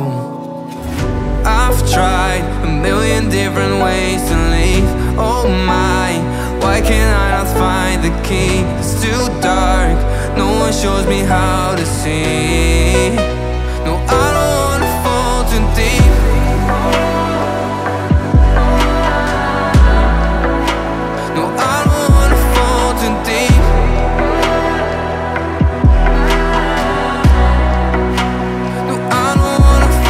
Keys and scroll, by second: 2.3 ctrl+d, 7.5 space, 9.3 ctrl+g, 12.5 alt+Right, 13.0 alt+Left, 14.3 ctrl+g, 15.1 space, 15.6 l, 17.6 3, 17.7 4, 17.8 5, 17.9 Return, 23.0 Up, 27.1-28.7 typing, 29.0 Escape.